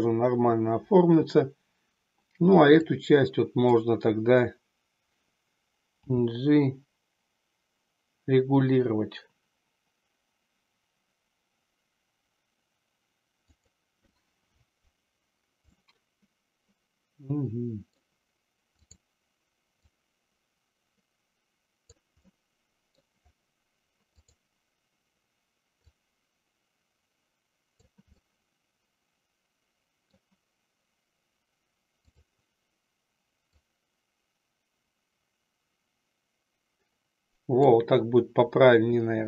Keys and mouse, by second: 2.9-3.8 drag, 6.1 g, 13.8 click, 15.7-18.0 middle drag, 18.8 click, 19.8-22.0 drag, 22.3 middle click, 24.2 click, 25.8-27.9 drag, 28.3-30.2 middle drag, 33.6-37.8 drag.